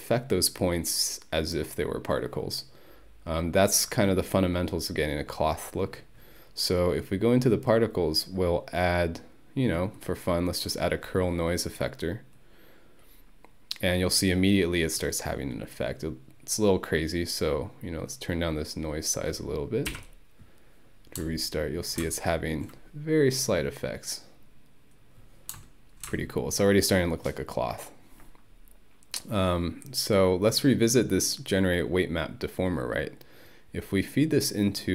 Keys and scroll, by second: 19.9 Home.